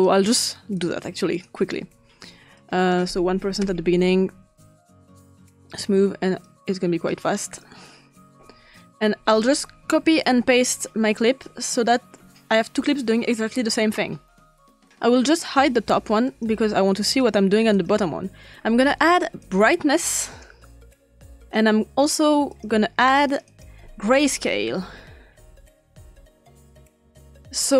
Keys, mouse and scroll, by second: 0.1-0.9 drag, 1.4 click, 2.6 click, 3.4 1, 3.5 click, 3.6 Return, 3.8 click, 5.1 click, 5.7 click, 6.4-7.7 drag, 9.0 click, 9.9 ctrl+c, 10.3 ctrl+v, 10.8 click, 15.5 click, 16.2 click, 16.6 click, 17.0 click, 17.7 click, 19.4 click, 20.9 click, 21.5 click, 23.3 click, 24.0 click, 24.0-25.3 typing, 26.0-27.2 drag, 27.6 click.